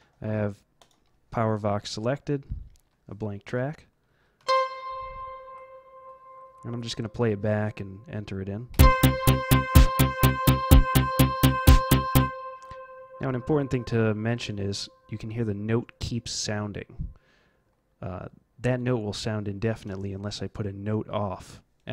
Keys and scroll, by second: 4.4 z, 8.7 F11, 12.1 F12, 14.9 Home.